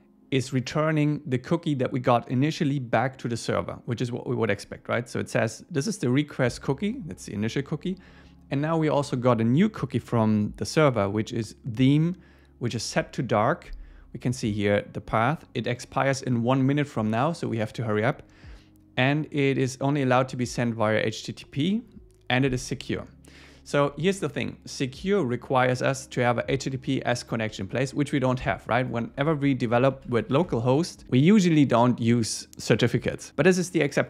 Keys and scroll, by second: 30.0 super+Left, 30.3 alt+shift+Right.